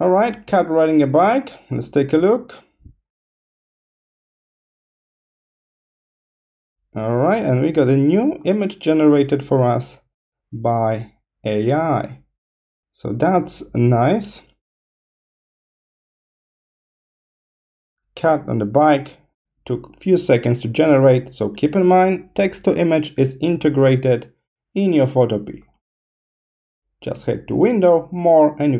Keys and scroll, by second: 21.7 BackSpace.